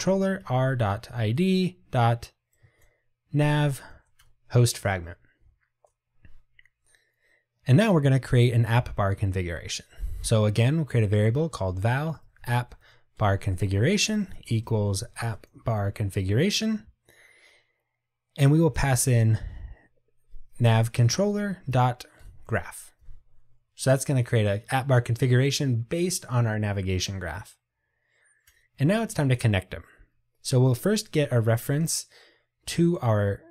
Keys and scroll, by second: 4.3 Return, 13.3 Return, 15.9 Tab, 21.2 Return.